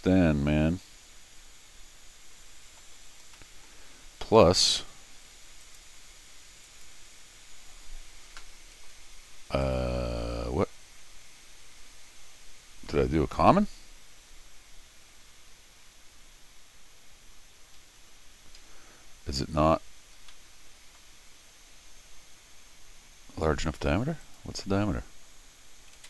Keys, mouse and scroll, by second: 3.3 middle click, 4.3 scroll down 1, 5.6 click, 6.6 click, 9.6 click, 13.3 click, 17.5 Escape, 17.8 Escape, 18.0 Escape, 18.2 Escape, 18.6 Escape, 20.3 middle click, 24.2 click, 25.9 alt+m.